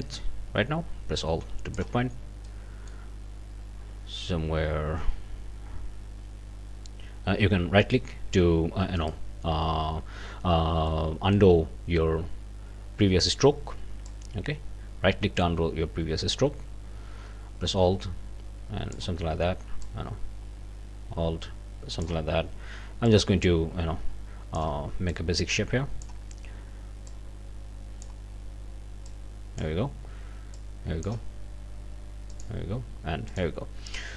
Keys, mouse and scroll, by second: 2.5 click, 7.8 right click, 9.0 right click, 10.9 click, 14.1-19.1 drag, 19.8-22.2 drag, 23.1-24.8 drag, 25.1-26.2 drag, 27.1-28.2 drag, 29.1 click, 30.5 click, 32.3 click, 33.3 click.